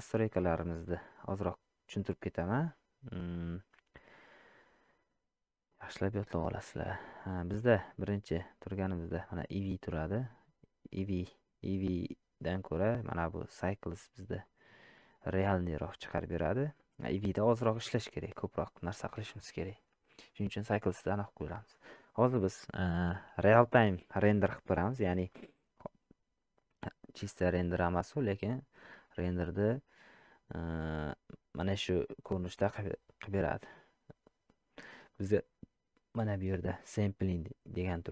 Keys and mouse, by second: 7.4-8.9 drag, 12.5-14.7 drag, 35.2 click.